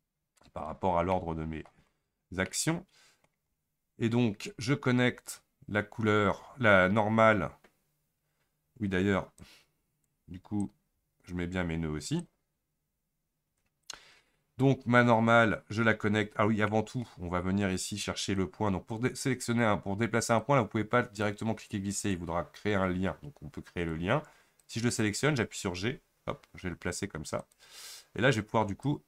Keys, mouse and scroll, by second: 24.0-26.1 drag, 26.1 g.